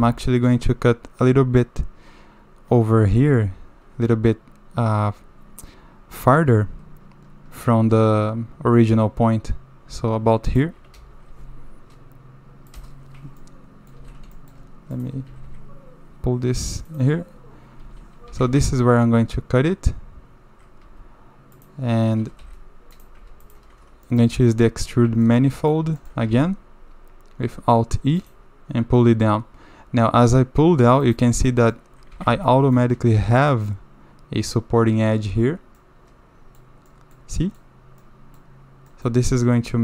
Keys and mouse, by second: 13.4 middle click, 14.0 2, 14.3 shift+middle click, 15.3 g, 17.8 1, 18.3 a, 18.4 a, 20.8 2, 21.6 click, 22.4 3, 22.9 click, 24.1 click, 25.3 shift+click, 25.6 click, 26.0 shift+click, 26.3 alt+e, 31.5 click, 32.1 a, 32.3 a, 32.4-32.7 middle drag, 33.5 middle click, 35.7-36.0 middle drag, 36.0 click, 36.4 middle click, 36.9 drag, 37.4 drag, 38.0-38.4 drag, 38.9 click, 39.6 shift+drag.